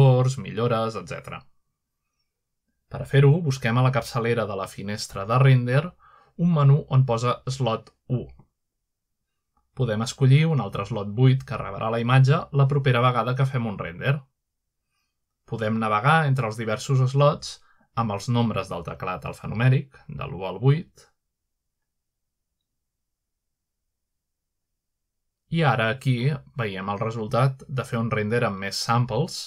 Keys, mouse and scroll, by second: 0.2 scroll up 1, 3.3 click, 4.5-5.2 typing, 5.4 Return, 6.6 F11, 8.2 click, 9.9 click, 12.2 click, 13.0 typing, 13.8-14.3 scroll down 1, 14.3-14.9 scroll up 1, 17.3 F12, 19.0 scroll up 1, 20.0-27.0 typing, 27.9 scroll up 1.